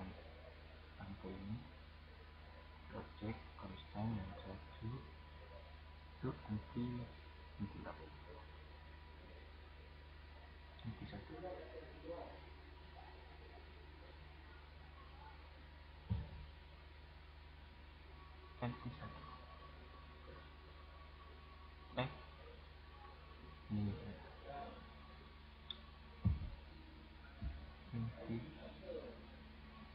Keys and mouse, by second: 3.6-4.4 drag, 5.7-7.6 drag, 8.8 right click, 14.8-16.6 drag, 20.3-22.1 drag, 22.9-25.0 right drag, 25.0-26.7 drag.